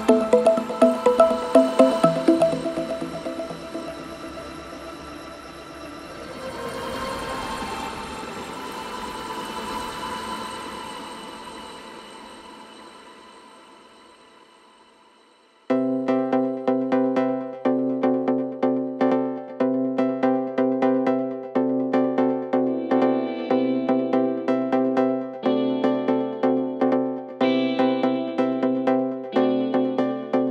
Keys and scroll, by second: 1.3 ], 4.9 ], 7.6 ], 8.0 ], 19.9 ], 22.5 4, 28.0 3.